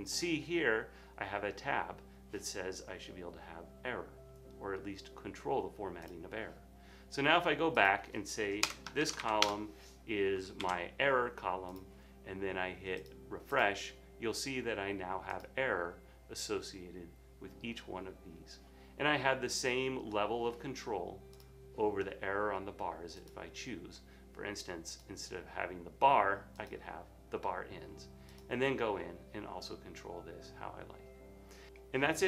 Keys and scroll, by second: 9.2 typing, 10.7 super+s, 12.1 typing.